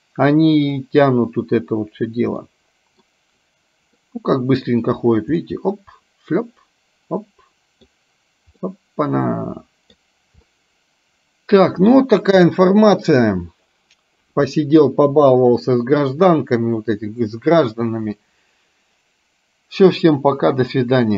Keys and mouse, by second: 0.7 click, 2.6 middle click, 4.1 middle click, 5.5-8.1 middle drag, 8.7-10.1 middle drag, 10.6-12.0 middle drag, 12.6 shift+middle click.